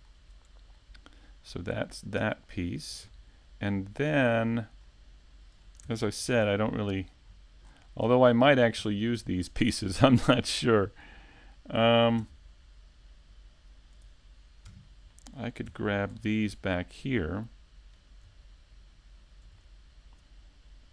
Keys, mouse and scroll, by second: 0.2 click, 0.3-0.7 scroll up 2, 0.7 shift+middle click, 1.8 click, 2.5 middle click, 3.1 shift+middle click, 3.9 middle click, 5.0 click, 5.6 middle click, 6.9 KP_Decimal, 7.5 scroll down 3, 8.2 Tab, 8.2 scroll down 2, 8.6 middle click, 9.5 right click, 10.1 x, 10.9 Tab, 10.9 scroll down 1, 11.3 middle click, 11.9-12.5 scroll down 2, 12.7 middle click, 13.9 s, 15.7 click, 17.4 scroll down 4, 17.7 middle click, 18.8 scroll down 1, 20.3 scroll down 3.